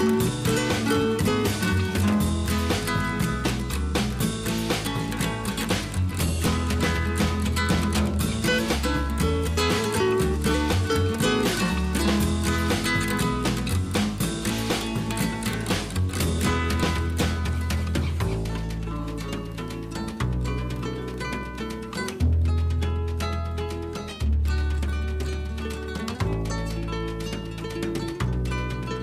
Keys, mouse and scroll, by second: 22.2 click.